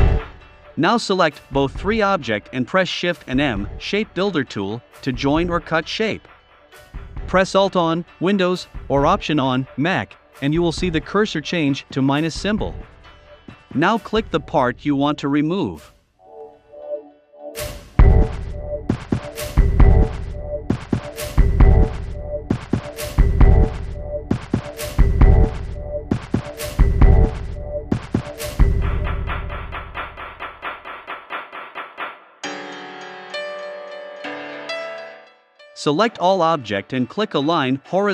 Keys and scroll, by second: 13.7 v, 26.9 a, 28.6 v, 30.6 i, 31.8 v.